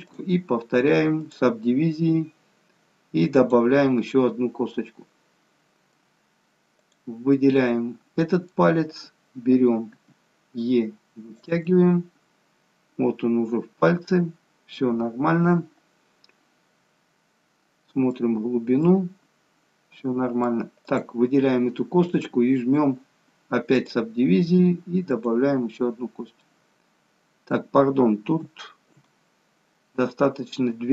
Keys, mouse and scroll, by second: 0.1 click, 3.4 click, 4.7 middle click, 6.8 click, 7.4 middle click, 10.0 e, 20.8 click, 22.1 click, 25.9-26.6 scroll down 2, 26.4 middle click, 29.2 ctrl+z.